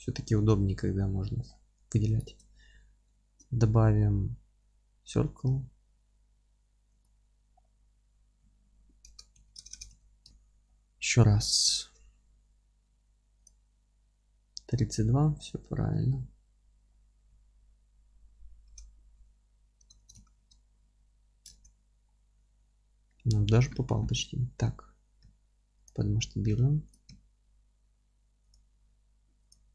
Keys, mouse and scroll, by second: 0.3 alt+q, 0.8-1.2 scroll up 1, 1.2-2.0 middle drag, 1.4-2.0 scroll up 1, 2.0 shift+right click, 2.7-7.0 middle drag, 7.0 shift+a, 7.5-7.9 scroll down 1, 8.4 s, 10.3 KP_7, 10.7-11.0 scroll up 1, 11.0 middle click, 11.2-13.2 scroll up 1, 13.4 shift+a, 14.9-15.3 scroll down 1, 16.0 alt+q, 16.8-17.3 scroll down 1, 17.3 s, 20.5 KP_Enter, 20.5-25.8 middle drag, 20.8 z, 21.5 alt+q, 22.0-22.3 scroll up 1, 25.2 s, 25.8 click, 26.0 g, 26.9 click, 27.1 s, 28.5 click, 28.7 g, 29.5 click, 29.6 g.